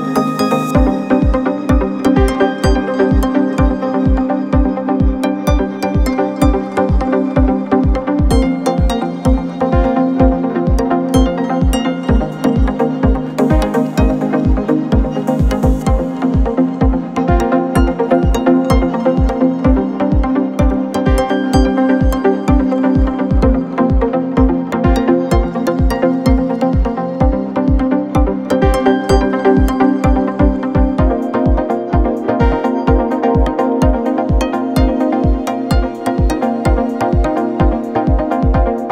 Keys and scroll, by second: 5.2 ctrl+d, 5.5 Escape, 7.3 ,, 8.4 F1, 8.5 F2, 12.3 f, 13.8 ], 15.8 F3, 37.6 ].